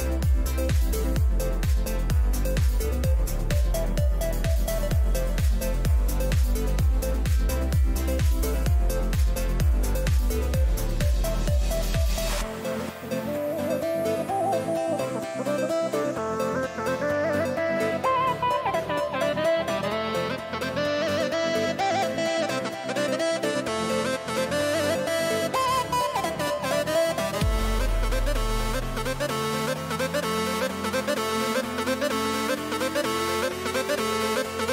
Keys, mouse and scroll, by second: 0.9 b, 4.1-8.2 middle drag, 7.7 g, 16.6-25.2 middle drag, 20.1 z, 27.3 a, 29.0-34.7 middle drag.